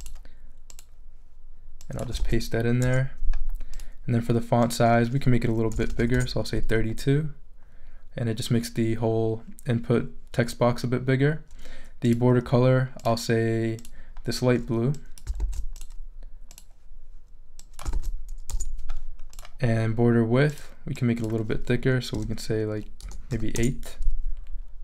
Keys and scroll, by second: 2.2 super+v, 2.8 super+Return, 5.5-6.4 typing, 15.4 super+c, 17.9 super+v, 18.5 super+Return, 22.1 |, 23.0 BackSpace, 23.3 8, 23.5 Return.